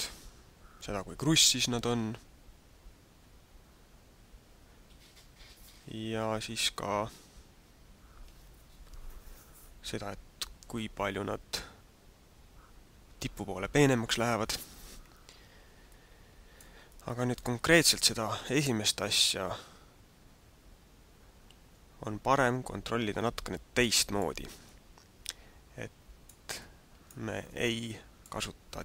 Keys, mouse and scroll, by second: 16.0 middle click, 16.8 middle click, 23.1 middle click, 24.7 middle click, 26.5 middle click, 27.6 shift+middle click.